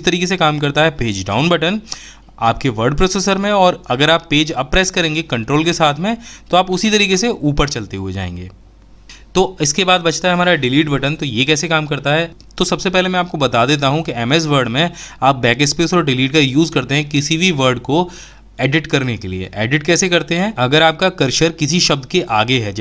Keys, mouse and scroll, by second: 3.5 ctrl+Page_Up, 9.2 Delete.